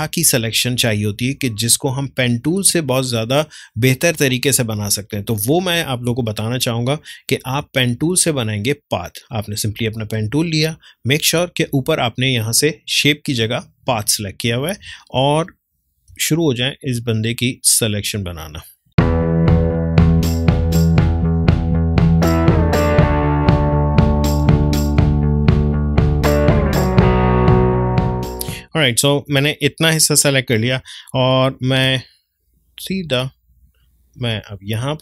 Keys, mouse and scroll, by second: 3.3-6.1 drag, 6.1 ctrl+space, 6.5 ctrl+click, 6.6 ctrl+space, 9.2 click, 12.2 click, 14.9 space, 15.1 ctrl+click, 15.4 ctrl+space, 16.7-23.0 drag, 23.0 ctrl+space, 23.1 ctrl+click, 23.2 ctrl+space, 23.4 click, 24.1 space, 24.5 click, 25.5 ctrl+z, 25.7-27.2 drag, 27.2 space, 27.7 click, 28.1 ctrl+space, 28.1 ctrl+click, 28.3 ctrl+space, 29.0 ctrl+space, 31.0 ctrl+click, 31.3 ctrl+space, 32.3 click.